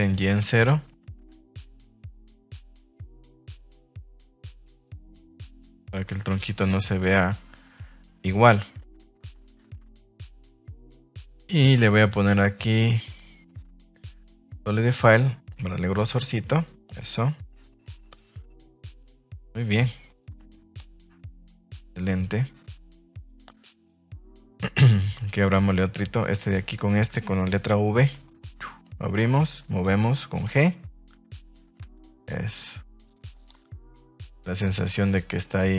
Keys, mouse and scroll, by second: 0.2 KP_0, 0.4 Return, 1.1 r, 5.8 Tab, 6.0 z, 6.8-7.3 middle drag, 7.7-8.5 middle drag, 9.1 middle click, 10.0 ctrl+s, 10.6-14.4 drag, 15.5-17.9 drag, 18.0 middle click, 19.2 middle click, 20.3 Tab, 20.7-24.6 middle drag, 24.8 middle click, 25.1 shift+middle click, 26.2 right click, 26.7 shift+right click, 28.6 v, 29.8 right click, 30.4 shift+right click, 31.7 r, 33.3 click, 33.5 Tab, 33.8 middle click, 34.2 a, 34.3 a, 34.4 middle drag, 34.8 shift+middle click, 35.0-35.7 middle drag.